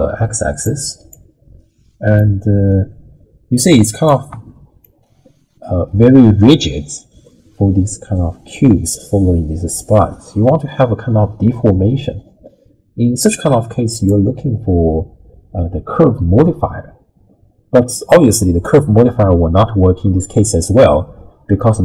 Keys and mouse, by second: 1.1-2.2 drag, 2.7-3.2 middle drag, 3.4 middle click, 3.6-4.0 middle drag, 4.8-13.2 shift+drag, 14.1-21.8 drag.